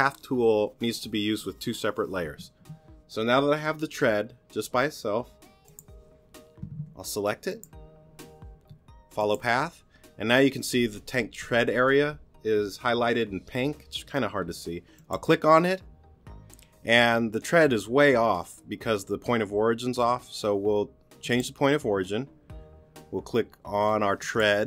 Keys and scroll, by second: 6.8 t.